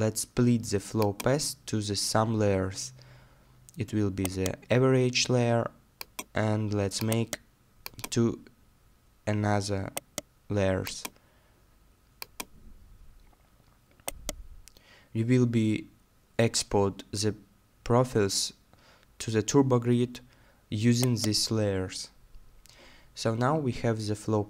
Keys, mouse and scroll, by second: 2.1-3.7 scroll down 1, 4.2-6.2 scroll down 1, 7.1 right click, 8.4-9.9 scroll down 1, 9.9-12.0 scroll down 1, 13.1 middle click, 14.1 right click, 14.9 middle click, 19.6-20.0 scroll down 1, 20.0 middle click, 21.0 right click, 21.8 middle click, 23.5-24.4 scroll down 1.